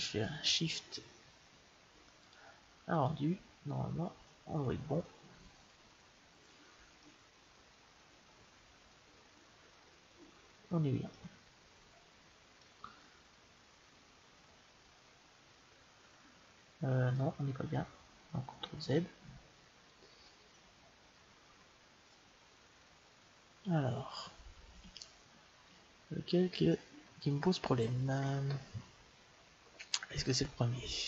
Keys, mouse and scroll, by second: 2.1-4.0 drag, 6.9-8.7 middle drag, 12.6 middle click, 13.6 middle click, 19.4 ctrl+z, 21.0 ctrl+z, 25.5 ctrl+z.